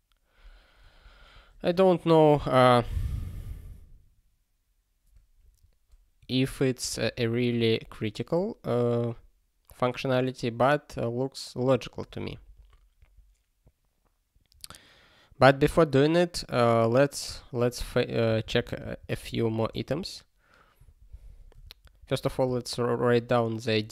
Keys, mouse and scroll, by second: 1.3 super+b, 3.0 ctrl+s, 7.1 ctrl+p, 12.0 ctrl+p, 12.1 ctrl+p, 12.3 ctrl+p, 12.6 ctrl+p, 13.0 ctrl+p, 18.3 ctrl+n, 18.4 ctrl+n, 18.6 ctrl+n, 18.6 ctrl+n, 18.8 ctrl+n, 19.0 ctrl+n, 19.7 alt+Return, 20.8 ctrl+p, 21.1 ctrl+k, 21.6 ctrl+e, 22.0 space, 22.4 BackSpace.